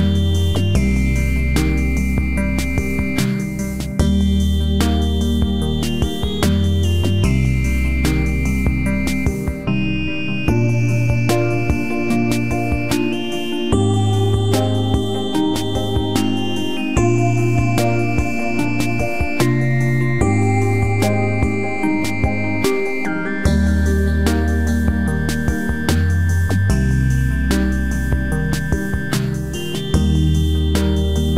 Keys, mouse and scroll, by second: 1.4 c, 5.3-7.1 right drag, 6.0 z, 7.4 z, 7.7 c, 9.5-11.3 right drag, 9.6 z, 10.6 z, 11.6 i, 13.0 middle click, 13.5 z, 14.4-15.6 drag, 15.5 KP_3, 16.2 z, 17.8 ctrl+z, 18.2 ctrl+z, 20.2 i, 22.1 z, 22.3-23.4 middle drag, 23.4-24.4 drag, 24.4 KP_3, 24.6 z, 25.3 c.